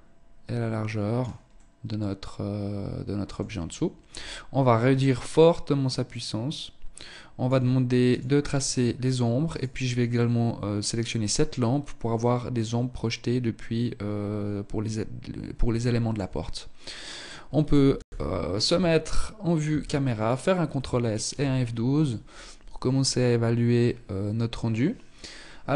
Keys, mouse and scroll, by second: 0.7 middle click, 4.1 click, 7.3 click, 8.6 right click, 9.3 middle click, 15.0 shift+middle click, 15.5 scroll up 2, 17.1 KP_0, 18.7 ctrl+s.